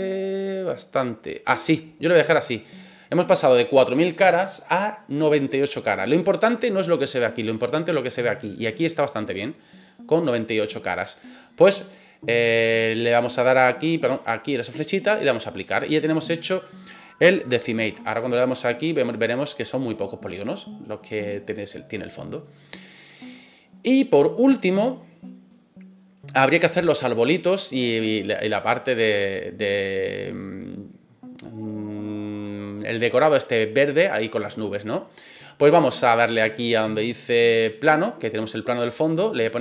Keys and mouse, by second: 13.4-14.1 drag, 14.5-15.3 drag, 15.8-16.6 middle drag, 17.5-17.9 shift+middle drag, 18.7 click, 22.3 click, 23.0-23.9 middle drag, 24.2-24.6 shift+middle drag, 24.8-25.5 middle drag, 39.5 click.